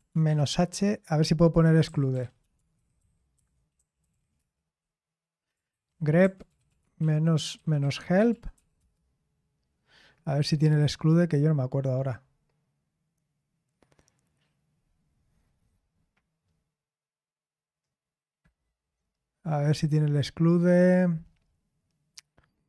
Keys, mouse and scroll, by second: 0.0-4.6 typing, 5.7 ctrl+c, 6.0-9.0 typing, 13.0-15.4 scroll up 1, 13.0 typing, 19.0-20.6 scroll up 1, 20.6 scroll up 1, 20.6-21.3 scroll down 1, 21.3-22.0 scroll down 1, 22.0-22.6 scroll down 1.